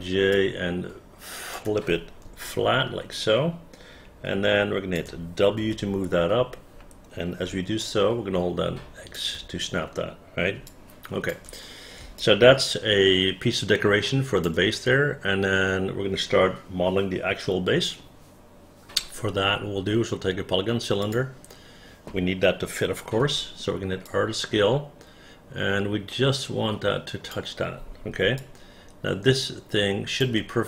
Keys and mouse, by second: 0.0 j, 0.5-1.7 drag, 2.6-5.1 alt+drag, 5.7 w, 7.6 x, 7.9-9.3 drag, 10.8 alt+click, 12.3-14.5 alt+drag, 24.2-27.5 drag, 24.2 r, 28.5-30.3 alt+drag.